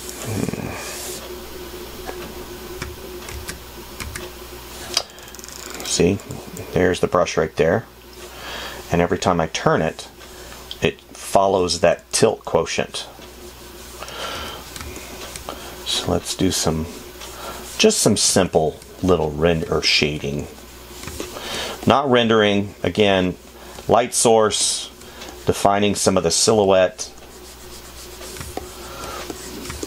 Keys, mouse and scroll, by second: 15.2 space, 18.6 space, 25.0 space.